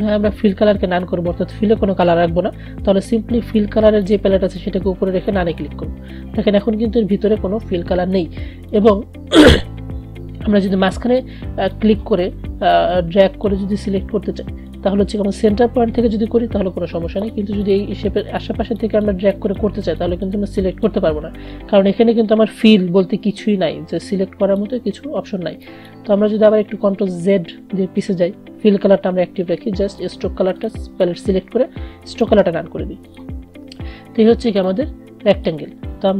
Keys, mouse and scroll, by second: 4.2 click, 8.7-17.4 drag, 24.2-25.8 drag, 27.8 ctrl+z, 30.6 click, 30.7-36.1 drag.